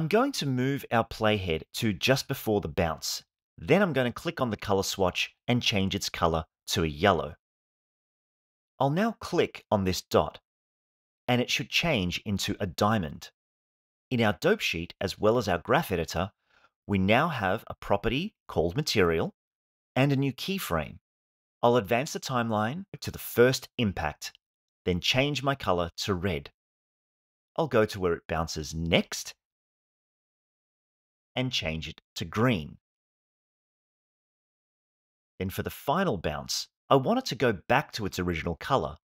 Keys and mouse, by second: 4.2 click, 10.1 click, 15.7 click, 16.9 click, 17.7 drag, 18.9 click, 25.5 click, 28.4-29.5 drag, 32.2 click.